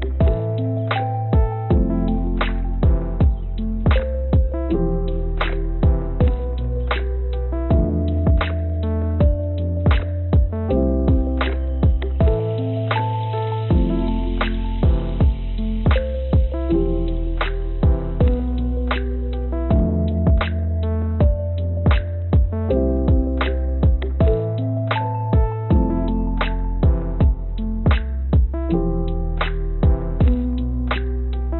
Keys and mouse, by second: 3.6 click, 8.3-9.8 drag, 9.9 click, 10.9 click, 28.1 click, 28.2-30.0 drag, 31.1-31.5 drag.